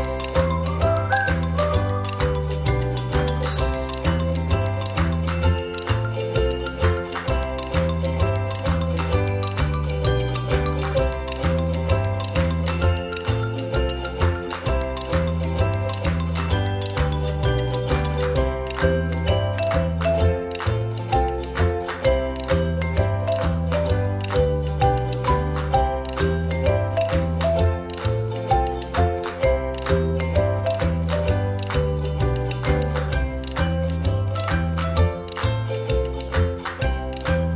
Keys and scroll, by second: 1.6 ctrl+-, 1.9 ctrl+-, 2.9 ctrl+g, 11.6 space, 16.8 space, 19.4 ctrl+=, 19.6 ctrl+=, 19.8 space, 23.0 ctrl+z, 28.6 ctrl+c, 28.8 ctrl+f, 30.7 space.